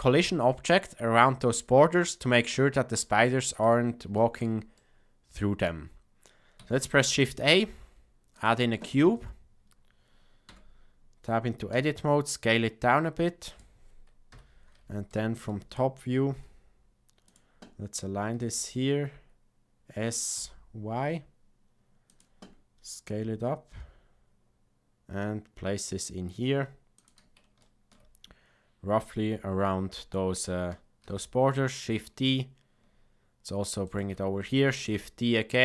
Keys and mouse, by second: 2.5-3.0 middle drag, 3.2-3.6 shift+middle drag, 4.1 shift+middle click, 4.7-6.2 middle drag, 6.8 shift+a, 10.4 Tab, 11.7 s, 14.2 KP_7, 15.0 shift+middle click, 16.1 g, 18.4 s, 23.0 g, 27.6 shift+middle click, 31.0 shift+d, 34.7 shift+d.